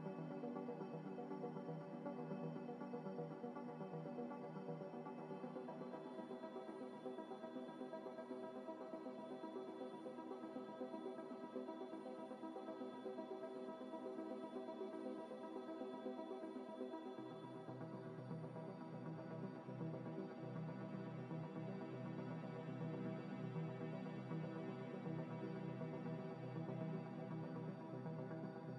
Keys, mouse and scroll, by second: 0.0-2.2 typing, 3.6 z, 4.2 y, 5.1 Tab, 5.6 middle click, 7.2 scroll down 1, 8.1 scroll down 1, 9.5 scroll up 1, 10.3 middle click, 12.2-12.9 scroll down 1, 13.8 scroll down 1, 14.4 scroll up 1, 16.1 a, 17.8 u, 18.6-19.0 scroll down 1, 19.0 scroll up 1, 19.2 a, 19.4 g, 19.5 y, 19.9 x, 20.9 scroll up 1, 21.3 g, 21.5 y, 21.7 x, 22.3 s, 23.6 s, 24.7-27.9 typing.